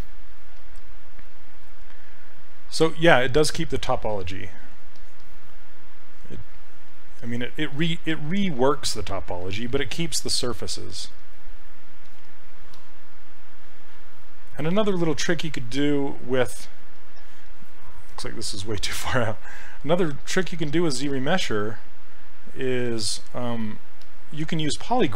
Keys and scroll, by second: 19.0 s, 24.0 s.